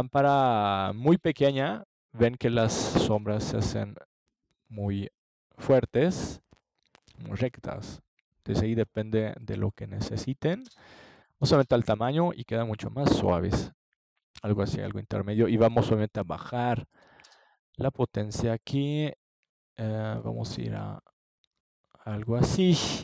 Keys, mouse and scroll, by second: 3.9 click, 4.0-7.1 middle drag, 8.2-9.3 middle drag, 9.3-11.2 drag, 11.2 middle click, 18.5 n, 20.1-22.6 middle drag.